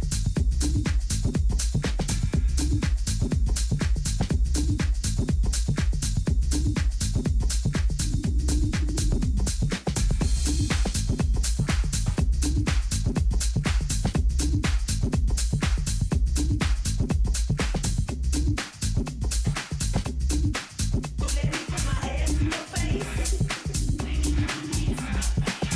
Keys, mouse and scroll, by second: 0.0 right click, 1.5 KP_7, 3.2 Tab, 5.4 z, 6.4 a, 6.8 a, 12.4 b, 13.5-15.2 middle drag, 15.3 middle click, 19.4 b, 21.8-24.9 middle drag.